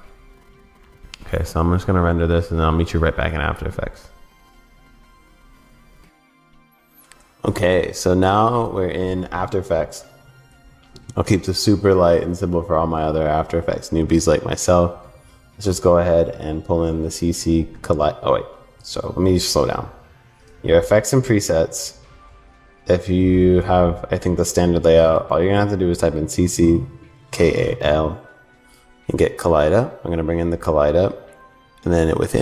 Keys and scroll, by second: 2.6 super+s.